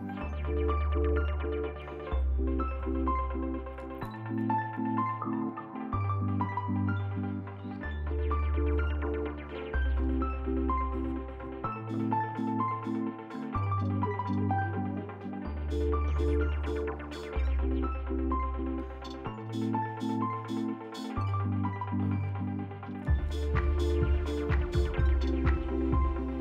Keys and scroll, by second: 0.0-1.5 typing, 9.2 f, 10.6 alt+x, 23.2 s, 24.3 ctrl+z.